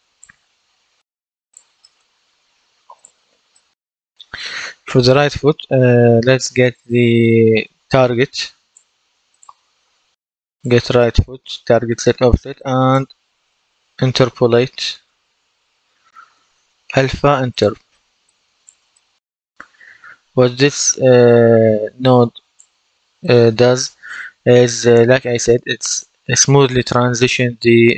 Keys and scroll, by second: 13.4-15.3 typing.